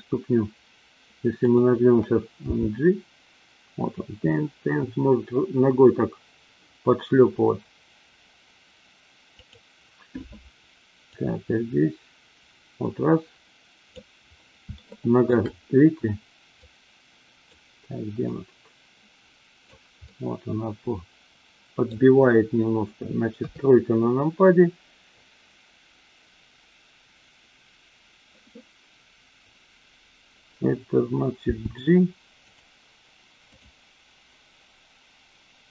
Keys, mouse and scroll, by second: 2.5 g, 9.4 click, 11.1-14.0 drag, 14.7 shift+middle click, 16.7-17.5 drag, 18.2-19.7 drag, 20.1-21.9 middle drag, 23.4 KP_3, 31.5 g, 33.5 click.